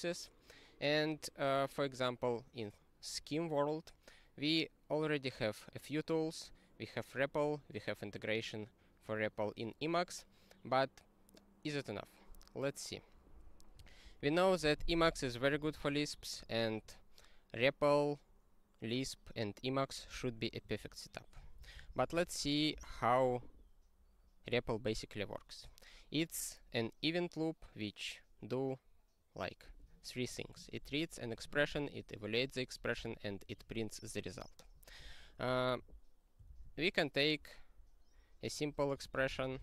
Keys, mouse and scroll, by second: 14.0 ctrl+n, 14.6 ctrl+g, 14.9 ctrl+space, 15.0 ctrl+e, 15.6 ctrl+g, 21.6 ctrl+n, 21.7 ctrl+n, 21.9 ctrl+n, 22.0 ctrl+n, 22.2 ctrl+n, 22.8 ctrl+n, 35.7 super+f, 36.7 super+f, 36.9 ctrl+z, 39.1-39.6 typing.